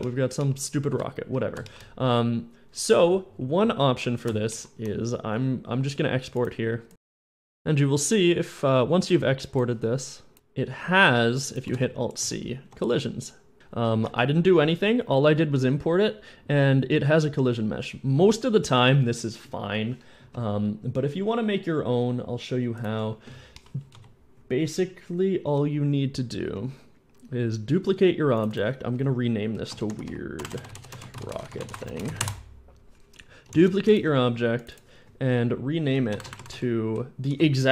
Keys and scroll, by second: 1.0 End, 11.5 alt+c, 11.8 alt+c, 12.0-12.9 typing, 24.0 End, 25.3 Tab, 25.5 Tab, 26.4 Tab, 26.6 Tab, 29.6-32.1 typing, 32.0 Return, 33.5 shift+d, 35.7 Right, 35.9-36.5 typing.